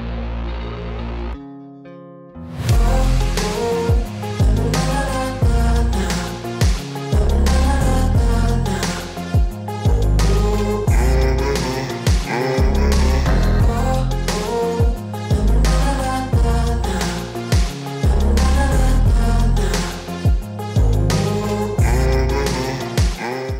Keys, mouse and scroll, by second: 1.4 click, 1.5 Down, 3.4 Down, 3.8 click, 6.1 click, 7.1 click, 8.8 click, 9.9 Up, 11.0 Up, 12.3 click, 13.7 click, 17.5 click, 19.1 click, 20.0 click, 20.6 alt+click.